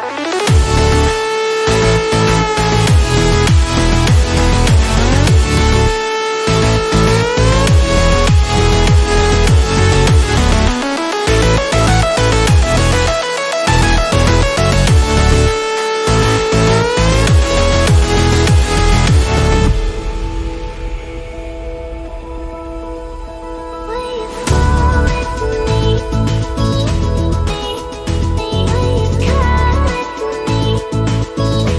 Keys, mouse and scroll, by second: 2.5-3.8 drag, 5.9 right click, 7.5-15.9 drag, 17.0 click.